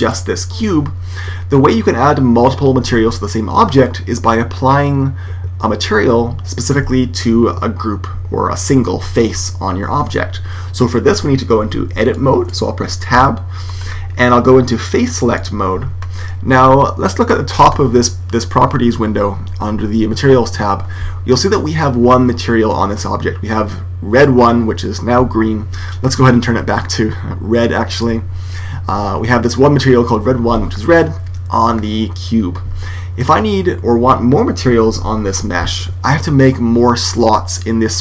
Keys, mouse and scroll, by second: 12.0-13.1 middle drag, 13.1 Tab, 15.3 click, 17.2-19.5 middle drag, 25.9 click.